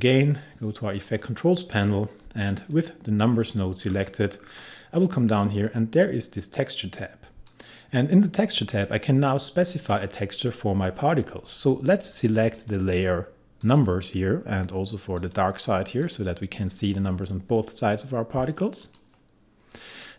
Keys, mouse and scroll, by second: 1.1 click, 3.9-6.7 scroll down 1, 7.5 click, 12.6 click, 18.9 click.